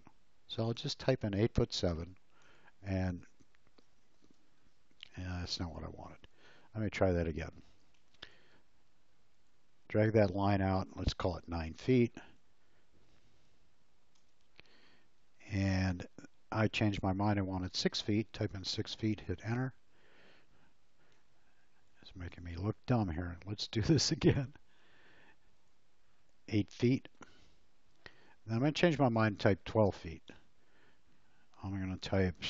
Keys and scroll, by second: 1.3 7, 2.4 Return, 4.5 space, 5.4 e, 7.9 l, 11.5 9, 12.2 Return, 14.1 Return, 18.1 6, 19.2 Return, 21.2 e, 23.8 l, 26.8 8, 27.4 Return, 29.1 1, 30.2 Return.